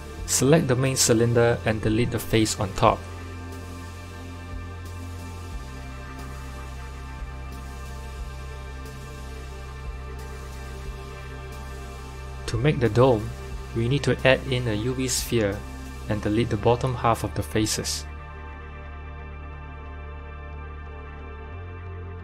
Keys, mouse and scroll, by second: 0.7-1.5 scroll down 2, 1.5 click, 2.1 click, 2.7-3.1 scroll down 1, 3.1 middle click, 3.7 click, 4.5 3, 4.7 click, 5.3 middle click, 6.1 click, 7.4 x, 9.4 Tab, 10.3 click, 11.3 KP_1, 12.3 shift+a, 18.1 shift+middle click, 18.9 g.